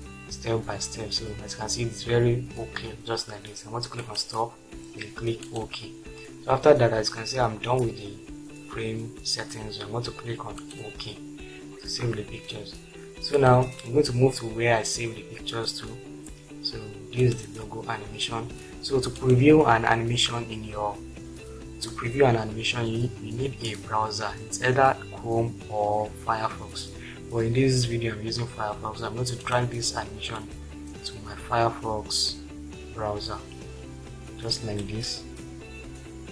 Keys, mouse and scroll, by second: 4.0 click, 10.6 click, 19.1 click, 30.6 click, 33.5 drag.